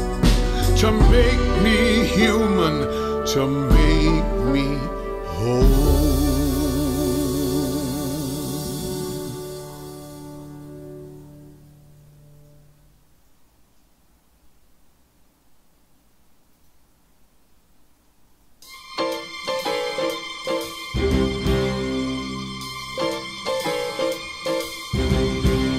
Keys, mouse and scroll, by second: 4.5-5.8 drag, 5.8-7.6 middle drag, 5.8-6.4 scroll, 7.6-18.3 drag, 18.3-19.2 scroll up 4, 19.2 middle click, 20.2-21.5 scroll down 8, 21.5 scroll, 21.6 scroll, 21.8-22.1 scroll, 22.1 scroll, 22.1 s, 23.6 m, 24.2-25.2 drag.